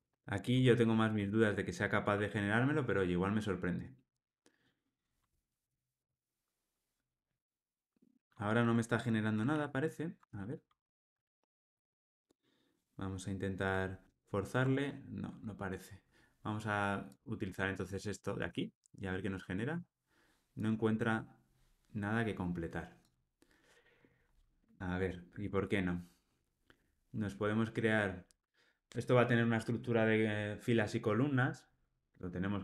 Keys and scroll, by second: 0.4 Tab.